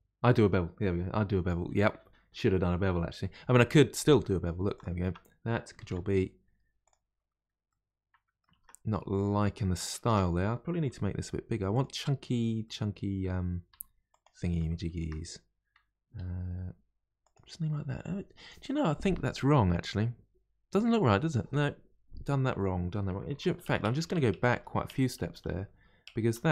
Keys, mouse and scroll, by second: 4.7 alt+click, 5.8 ctrl+b, 7.2-7.7 scroll down 1, 7.7 middle click, 8.5 ctrl+z, 9.3 scroll up 2, 10.1 Tab, 10.9 s, 12.1 scroll down 2, 12.6-13.7 middle drag, 13.7 s, 14.8-16.2 shift+middle drag, 16.2 g, 22.3-22.6 scroll up 2, 23.4-24.5 ctrl+z.